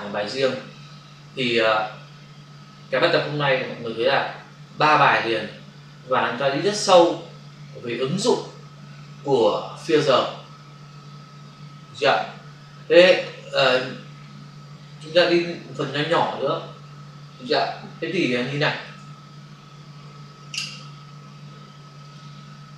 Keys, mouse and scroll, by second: 18.9 ctrl+s, 22.0 click, 22.1 click.